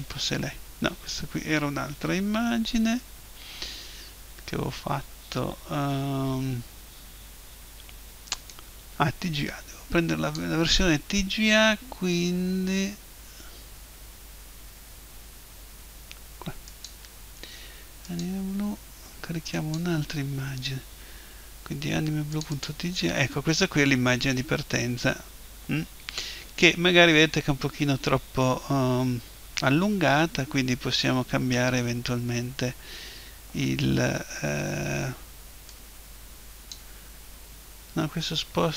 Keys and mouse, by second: 0.0 click, 8.5 click, 16.7 click, 19.5 click, 22.7 click, 24.5-27.2 middle drag, 35.7 click.